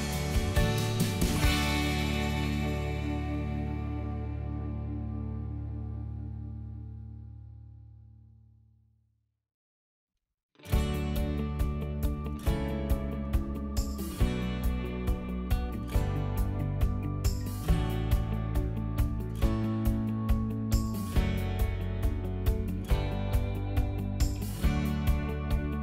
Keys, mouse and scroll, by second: 0.0 click, 0.6 shift+click, 1.3 shift+click, 1.5 shift+click, 1.8 middle click, 2.4 shift+click, 3.1 shift+click, 3.8 shift+click, 4.9 shift+click, 5.4 shift+click, 5.5 shift+click, 5.8 middle click, 6.1-6.6 scroll down 1, 7.6 ctrl+click, 9.1 middle click, 10.1 click, 10.3 middle click, 10.8 scroll up 1, 11.2-11.5 scroll down 1, 11.5 click, 12.2 scroll up 1, 12.5 right click, 14.3 click, 14.6 middle click, 14.9 click, 15.2 middle click, 16.1-16.7 scroll up 1, 16.7 middle click, 17.9-18.4 scroll down 1, 18.4 click, 19.2 middle click, 19.4 g, 20.1 s, 20.7 click, 23.1 middle click, 23.5 shift+middle click, 23.7 click, 24.0 scroll up 1, 24.4 click, 24.8 middle click, 25.7 middle click.